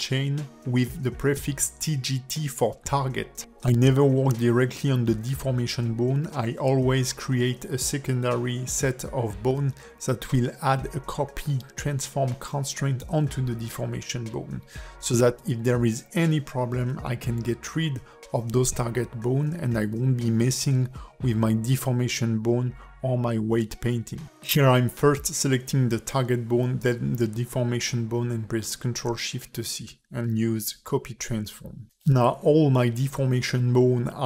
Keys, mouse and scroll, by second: 2.0 ctrl+F2, 4.6 KP_0, 8.1 click, 9.1 click, 10.2 click, 10.4 click, 12.6 Tab, 13.8 shift+click, 14.6 click, 15.0 click, 15.5 click, 16.4 shift+click, 18.1 ctrl+shift+c, 20.0 click, 21.3 shift+click, 21.8 shift+click, 22.2 ctrl+shift+c, 23.3 click, 24.0 shift+click, 24.4 shift+click, 24.8 ctrl+shift+c, 25.9 click, 26.7 click, 29.3 shift+click, 30.8 ctrl+shift+c.